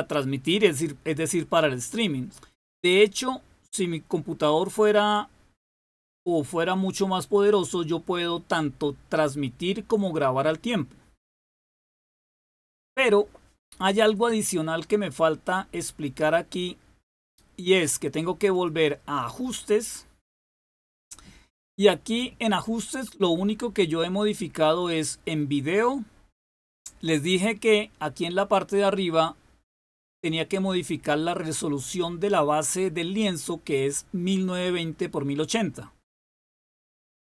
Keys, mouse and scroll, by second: 16.9 click, 18.4 click, 25.4 click.